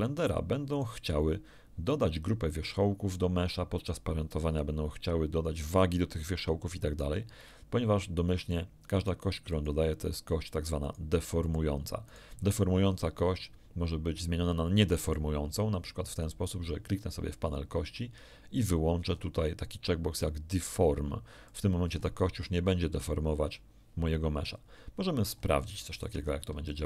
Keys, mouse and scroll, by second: 0.7 right click, 9.0 right click, 9.5 right click, 10.8 right click, 11.4 right click, 12.0 right click, 16.1 click, 19.0-19.3 scroll down 1, 21.4 click, 21.8-22.6 scroll down 2, 25.2-25.6 scroll down 2, 25.7 shift+middle click, 26.2 shift+scroll up 2, 26.6 shift+middle click.